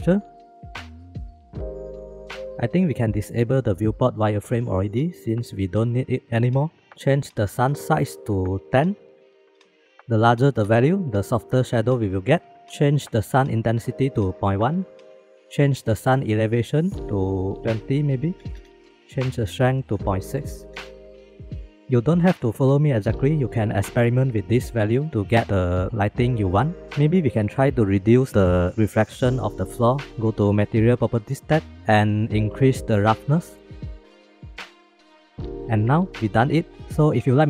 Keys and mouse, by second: 2.8-5.8 drag, 8.5-10.8 drag, 11.0 click, 11.4 click, 11.8 click, 12.1 click, 13.1 click, 14.9 middle click, 15.0 click, 16.3 middle click, 16.7 click, 18.9 middle click, 20.9 click, 21.0 click, 21.2 click, 33.2 click, 34.6 click.